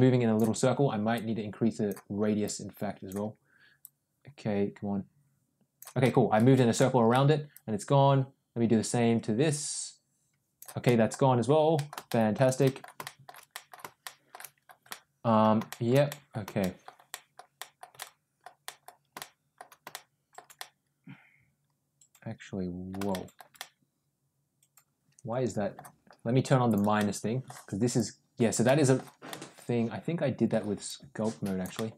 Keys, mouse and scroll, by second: 1.0 click, 2.3 click, 3.7-5.6 drag, 5.9 middle click, 6.6 middle click, 7.4-10.5 drag, 10.7 middle click, 11.6 middle click, 11.9 shift+middle click, 12.5 middle click, 13.0 shift+middle click, 13.4 middle click, 13.9 shift+middle click, 14.8 middle click, 15.6 shift+middle click, 15.9 middle click, 16.5 shift+middle click, 17.0 shift+middle click, 17.4 shift+middle click, 17.8 middle click, 18.5 middle click, 19.0 shift+middle click, 19.8 shift+middle click, 20.4-22.8 middle drag, 23.0 shift+middle click, 23.4-25.6 middle drag, 26.5 click, 26.8 middle click, 27.8 click, 28.5 middle click, 29.2-30.4 middle drag, 30.7 click, 31.6 middle click.